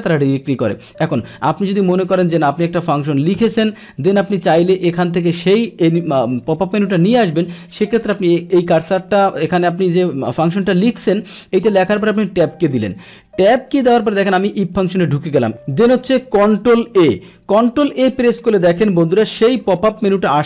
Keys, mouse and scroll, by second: 1.0 click, 1.8 click, 12.5 Tab, 14.2 click, 16.9 ctrl+a, 18.5-20.0 drag.